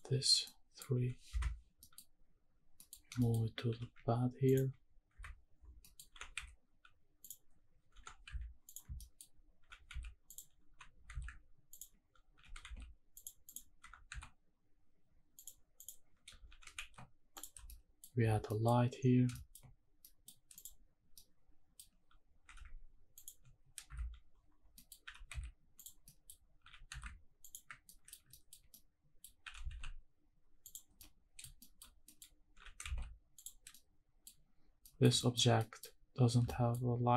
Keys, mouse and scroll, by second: 0.5 middle click, 1.0 g, 1.3 Escape, 1.8 middle click, 2.0-2.6 scroll up 1, 2.6 scroll down 2, 2.7 middle click, 3.2 shift+middle click, 3.7 g, 4.5 ctrl+click, 5.1 KP_Decimal, 5.7 scroll down 1, 5.8 middle click, 6.2 r, 6.5 z, 7.2 click, 7.9 r, 8.2 z, 8.7 click, 9.0 shift+middle drag, 9.6 g, 9.9 z, 10.3 click, 10.7 g, 11.1 z, 11.7 ctrl+click, 12.0 scroll down 1, 12.3 g, 13.2 click, 13.5 click, 13.8 r, 14.1 z, 15.4 drag, 15.7 click, 16.5 g, 16.9 shift+z, 17.3 drag, 17.5 scroll down 2, 17.7-18.0 middle drag, 18.2 scroll down 2, 18.5 middle drag, 19.0-19.3 scroll down 2, 19.3 shift+middle drag, 20.0 middle click, 20.5 click, 21.0 scroll down 1, 21.1-21.7 middle drag, 21.9 scroll up 1, 22.5 g, 23.2 ctrl+click, 23.9 KP_Decimal, 24.4-24.7 scroll down 2, 24.7 middle click, 25.0 g, 25.3 z, 25.8 click, 26.0 middle click, 26.4 scroll up 1, 26.6 g, 27.0 z, 27.4 ctrl+click, 27.9 middle drag, 28.2 scroll down 1, 28.3 shift+middle drag, 28.7-29.2 middle drag, 29.4 g, 29.8 shift+z, 30.7 click, 31.0-31.4 middle drag, 31.6 shift+middle drag, 31.9 scroll down 1, 32.0 middle drag, 32.2 scroll up 1, 32.5 g, 32.9 shift+z, 33.4 click, 33.6 scroll down 1, 33.7-34.2 middle drag, 34.4-34.8 scroll up 1, 34.8 middle click, 35.2 shift+middle drag, 35.6 middle click, 35.9-36.4 scroll up 1, 36.5 shift+middle drag, 37.0-37.1 scroll up 1.